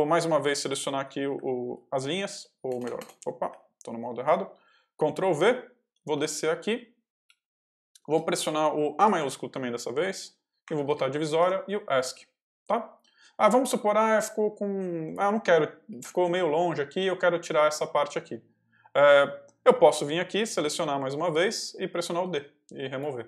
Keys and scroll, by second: 1.5 ctrl+v, 2.0 ctrl+y, 2.6 BackSpace, 3.4 Escape, 5.1 ctrl+v, 5.4 ctrl+j, 6.0 j, 7.1 k, 8.0 shift+k, 8.9 shift+a, 11.3 shift+Escape, 11.8 Escape, 13.3-15.8 typing, 16.9 k, 20.5 ctrl+v, 20.7 ctrl+j, 21.3 j, 22.0 d.